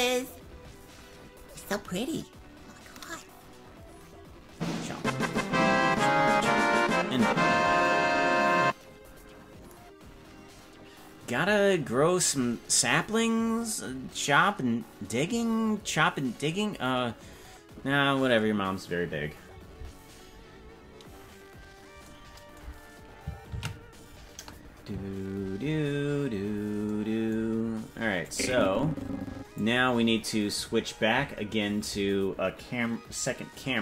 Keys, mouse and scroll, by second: 26.0 ctrl+s, 28.2-29.6 drag.